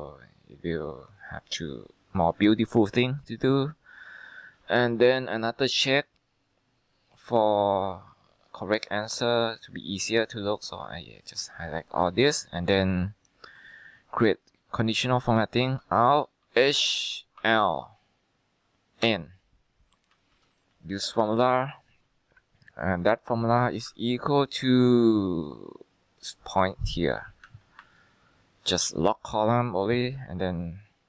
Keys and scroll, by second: 16.5 h, 17.5 l, 19.2 n, 20.2-20.9 typing, 21.4 Down, 24.0-25.0 typing, 27.9 F4.